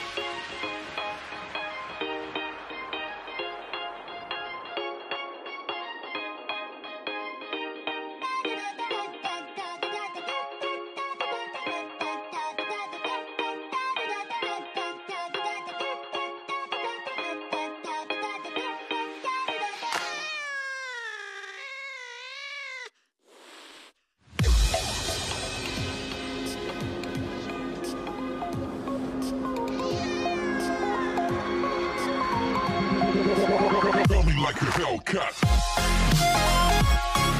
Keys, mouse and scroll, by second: 3.0 click, 5.0 click, 5.4-7.1 scroll down 3, 7.1 ctrl+z, 7.7 g, 12.8 click, 16.2 alt+z, 17.0 Tab, 17.8 click, 22.3-24.9 right drag, 24.9 click, 29.1 click, 29.8 drag, 30.8 click, 31.8 click.